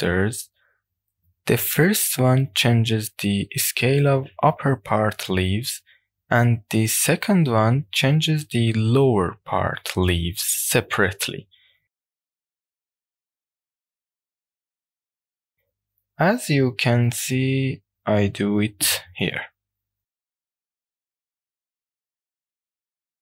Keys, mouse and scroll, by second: 1.2 middle click, 1.2 click, 1.2-2.2 scroll up 1, 2.2-4.1 drag, 8.2-10.1 drag, 11.9 w, 13.4-19.2 drag, 21.3-23.2 drag.